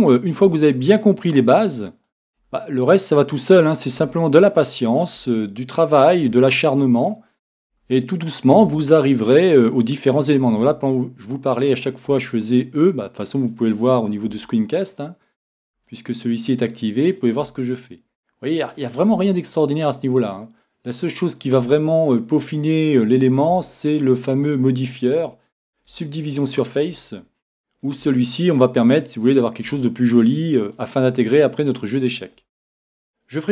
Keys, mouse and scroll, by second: 0.4 e, 2.4-8.9 drag, 2.4 e, 4.0 e, 5.2 e, 6.3 e, 7.7 e, 8.7 e, 9.9-11.6 drag, 10.6 e, 11.9-15.1 drag, 12.1 e, 14.3 e, 15.3 click, 15.5 click, 15.6 e, 16.4-20.8 drag, 17.4 e, 19.1 e, 21.4-24.6 drag, 21.5 e, 23.5 e, 25.0-26.7 drag, 26.2 middle click, 26.4 middle click, 26.7-28.0 middle drag, 28.0 e, 29.3-33.5 drag, 29.7 e, 31.1 e, 32.7 e.